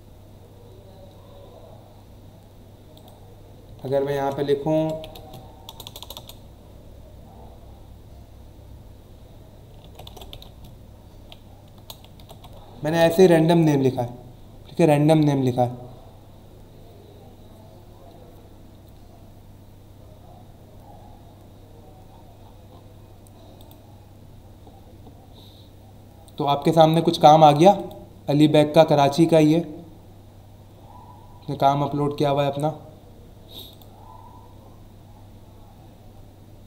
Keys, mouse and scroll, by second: 2.9 click, 3.9 a, 4.8 l, 5.1 space, 5.7 BackSpace, 9.8-12.8 typing, 13.0 Return, 18.3 scroll down 1, 19.5 scroll down 1, 20.5 scroll down 1, 21.0 scroll down 1, 21.7 scroll down 1, 22.1 scroll up 1, 23.5 click, 27.7 click, 30.0-31.1 scroll down 3, 31.8-33.3 scroll down 4, 33.7 click.